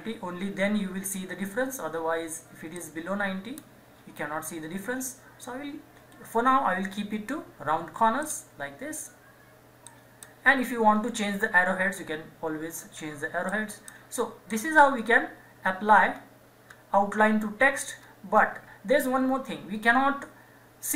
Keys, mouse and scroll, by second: 2.7-5.1 drag, 8.2-12.2 drag, 13.4 click, 14.9 scroll down 1, 16.7-17.6 scroll up 1, 17.6-18.0 scroll down 1, 19.8 scroll up 1.